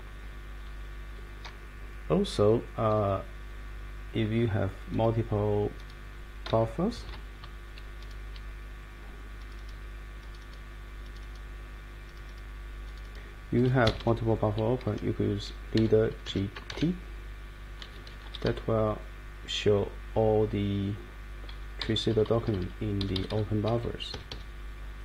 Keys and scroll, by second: 7.0 shift+F1, 13.8 Escape, 14.0 Escape, 15.5-17.2 typing, 18.5-19.6 Down, 19.7 Down, 19.9 Down, 20.1 Down, 22.1 Down, 22.3 Down, 22.4 Down, 22.5 Down, 23.0 Up, 23.1 Up, 23.3 Up, 23.7 Page_Up, 24.1 Escape, 24.3 Escape.